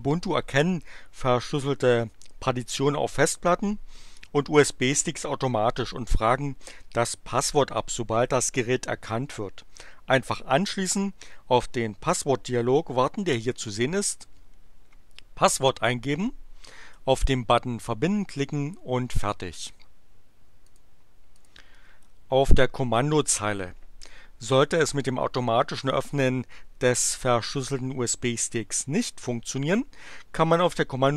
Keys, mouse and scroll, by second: 20.7 click, 21.3 click.